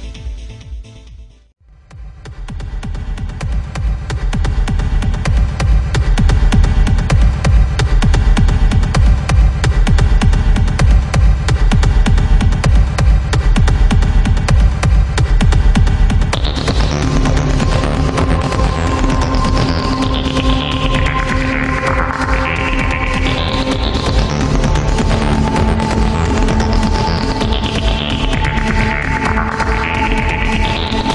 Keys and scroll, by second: 1.5 ctrl+z, 1.8 ctrl+z, 2.4 ctrl+z, 12.8 ctrl+z, 16.0 ctrl+z, 22.0 ctrl+z, 25.2 ctrl+z, 26.1 ctrl+z.